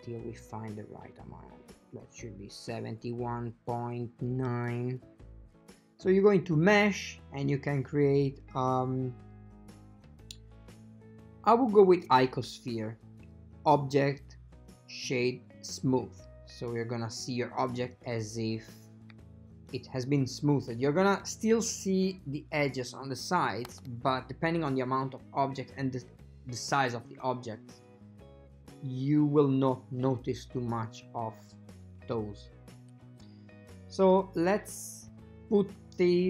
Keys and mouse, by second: 13.7-15.7 drag, 18.7 shift+middle click, 19.5 ctrl+middle click, 23.7 a, 23.9 a, 27.8 click, 30.1 click.